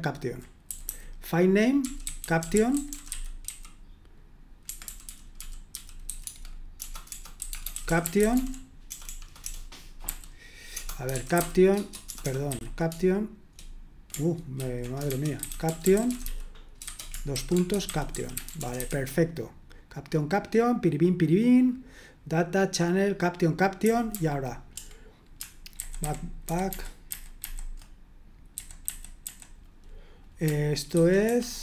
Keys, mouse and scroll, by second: 0.0-0.3 typing, 1.5-12.5 typing, 14.6 ctrl+w, 15.4-19.3 typing, 23.8 typing, 25.7 alt+b, 26.0 alt+b, 26.4 alt+b, 26.7 alt+b, 27.1 alt+b, 28.8 b, 30.9 alt+2, 31.2 alt+1.